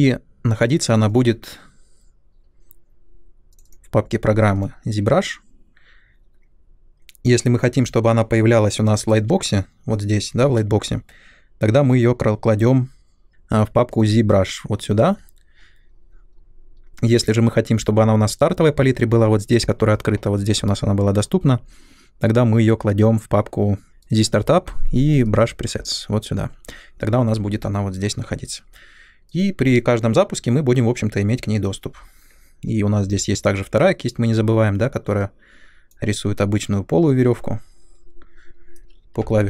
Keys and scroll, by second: 33.1 m, 39.2 m.